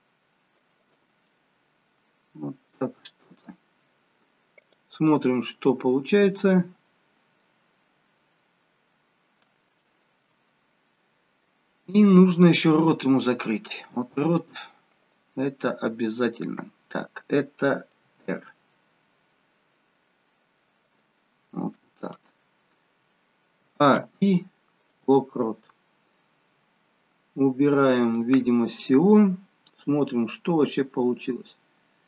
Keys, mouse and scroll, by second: 1.2 middle click, 4.6 click, 5.0 middle click, 7.6-8.9 scroll down 3, 8.9-9.5 scroll up 1, 9.7 shift+middle click, 9.7-10.3 scroll up 1, 10.3-10.9 scroll up 2, 11.0 middle click, 12.7 click, 14.2 click, 16.2 click, 18.0 r, 22.0 scroll down 1, 23.5 a, 23.9 i, 25.6-26.2 scroll down 1, 26.2-26.8 scroll down 3, 28.1 click, 30.4 click.